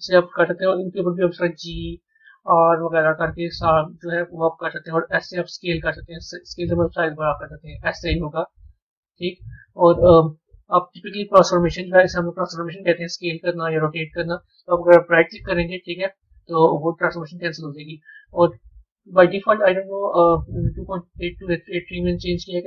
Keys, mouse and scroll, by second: 12.7 middle click, 18.8 Tab, 20.0-22.6 drag.